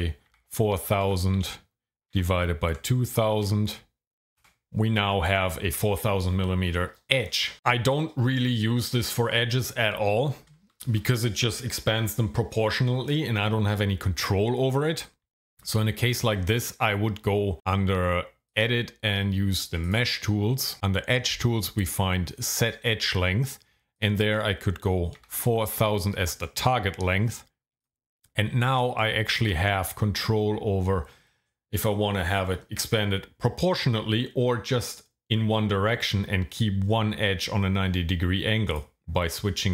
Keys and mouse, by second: 0.3 KP_4, 0.7 KP_0, 0.9 KP_0, 1.0 KP_0, 2.1 KP_Divide, 2.7 KP_2, 3.1 KP_0, 3.3 KP_0, 3.5 KP_0, 4.4 KP_Enter, 15.6 ctrl+z, 18.5 click, 19.8 click, 22.6-27.8 drag, 25.6 KP_0, 25.8 KP_0, 38.7-39.7 drag.